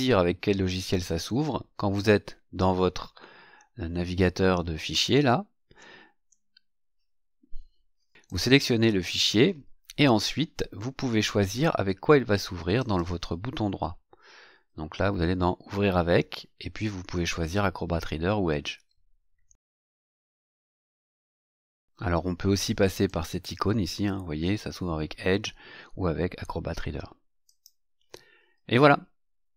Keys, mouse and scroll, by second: 1.9 click, 8.3 click, 12.7 right click, 20.1 click, 23.0 click, 27.4 click.